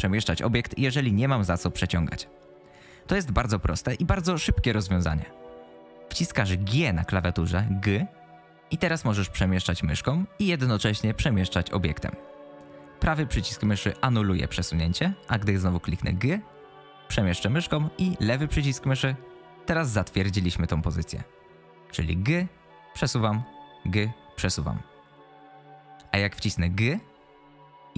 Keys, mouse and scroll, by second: 0.7 click, 1.3 click, 1.5 click, 1.7 click, 6.7 g, 15.9 g, 22.1 g, 23.7 g.